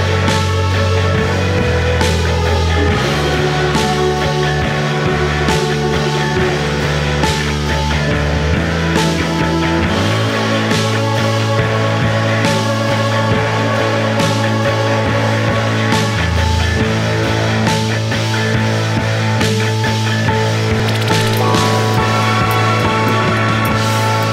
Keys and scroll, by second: 3.4 ], 5.0 ], 5.4 ], 6.1 ], 7.4 4, 8.9-9.9 typing, 16.0 4, 23.6 3, 23.9 ].